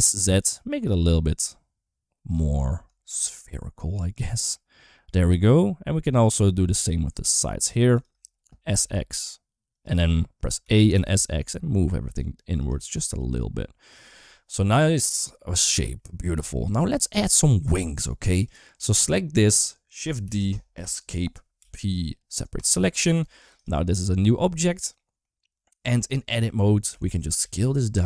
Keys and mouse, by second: 2.9 shift+middle click, 3.2-4.3 middle drag, 4.9-6.1 middle drag, 6.4 3, 6.6 click, 7.0 middle click, 7.8 shift+click, 8.4 s, 10.1 middle click, 10.4 a, 10.8 s, 12.8 middle click, 13.8 click, 14.4-15.5 middle drag, 15.9 middle click, 16.3 shift+middle click, 17.1 middle click, 18.3 click, 18.7 middle click, 20.1 shift+d, 21.4 p, 23.0 Tab, 23.4 click, 24.6 middle click, 25.3 Tab, 25.8 middle click, 26.7 a, 27.0 s.